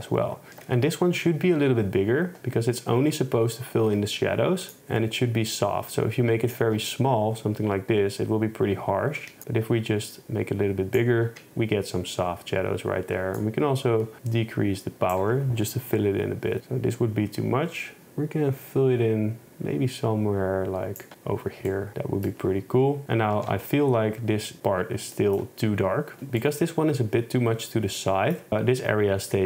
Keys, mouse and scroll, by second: 13.4 shift+click, 15.9 KP_0, 21.7 middle click, 23.4 shift+Tab, 26.4 middle click, 28.1 middle click.